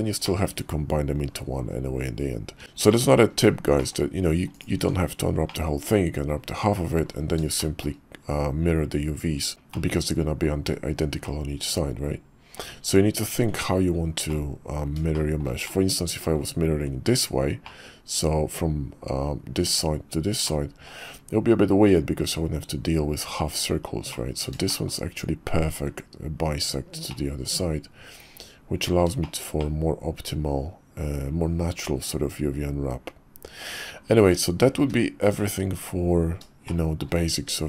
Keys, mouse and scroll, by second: 0.2 middle click, 2.6 KP_5, 2.9 middle click, 3.8 click, 4.7 Tab, 5.4 click, 7.5 shift+click, 9.7 middle click, 11.2-12.6 middle drag, 12.8 Tab, 13.5 Tab, 14.3 middle click, 15.1 shift+middle click, 15.6 middle click, 17.6 middle click, 20.4 middle click, 24.1 middle click, 24.7 shift+click, 27.1-28.9 middle drag, 29.2 shift+middle click, 29.6-33.6 middle drag, 34.2 Tab, 34.8 `, 35.5 KP_5, 36.6-37.0 shift+drag.